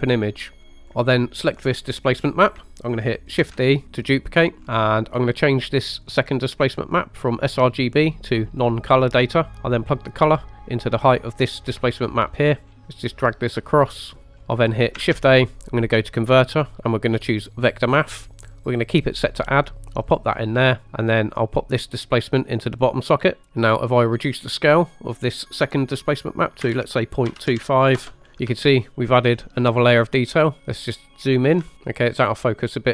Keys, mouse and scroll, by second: 0.6 scroll down 1, 0.7 middle click, 0.8 click, 1.8 scroll down 3, 3.5 shift+d, 4.6 click, 4.7-5.0 scroll up 2, 6.0 click, 6.8-8.8 drag, 9.9-11.8 drag, 12.3 middle click, 12.7 scroll down 2, 12.7 middle click, 13.3 click, 14.2 middle click, 14.4-15.0 scroll up 2, 15.1 shift+a, 20.2 click, 21.4 click, 21.7-22.9 drag, 23.6 middle click, 23.6 scroll up 1, 24.4-28.1 drag, 28.2 scroll up 2, 28.7-29.1 shift+middle drag, 29.4 scroll up 2, 30.6-30.9 scroll down 3, 30.9-31.4 shift+middle drag, 32.1 shift+middle click, 32.7 scroll up 1.